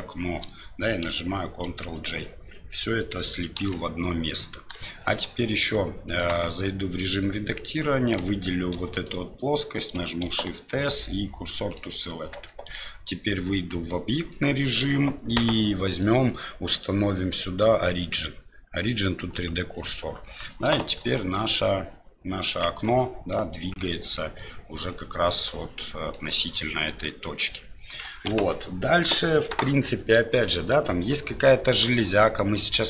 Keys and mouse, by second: 3.6 KP_7, 4.9 shift+middle drag, 6.1 right click, 6.4 Tab, 7.7 right click, 8.7 3, 8.9 right click, 10.2 shift+s, 12.5 Tab, 16.1-19.4 drag, 21.0 r, 22.8-23.3 middle drag, 23.7-24.2 middle drag, 25.8-26.2 middle drag, 32.2 middle drag.